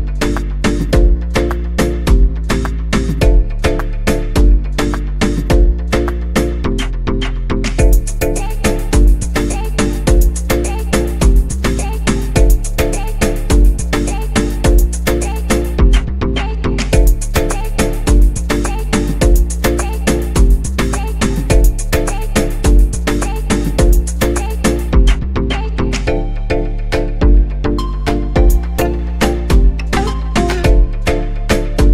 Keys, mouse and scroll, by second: 1.2 click, 2.3-2.8 scroll down 4, 3.1-4.6 scroll down 3, 4.6 click, 5.1-6.0 scroll down 3, 6.2-9.3 drag, 10.7-14.1 drag, 15.0-20.8 drag, 20.9-24.1 drag, 28.3-31.9 drag.